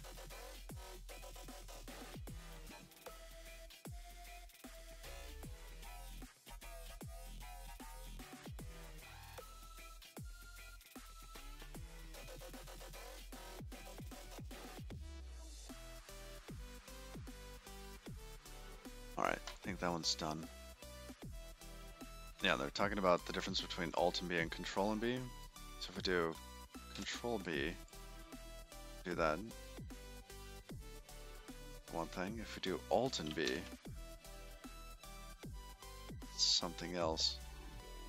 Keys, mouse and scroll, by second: 24.1-24.9 scroll down 12, 25.0 middle click, 27.7 ctrl+b, 31.1 middle click, 32.7 Escape, 32.9 Escape, 34.4 alt+b, 36.6-37.0 scroll up 6, 37.0 scroll down 2, 37.2-37.6 scroll down 8, 37.6 middle click.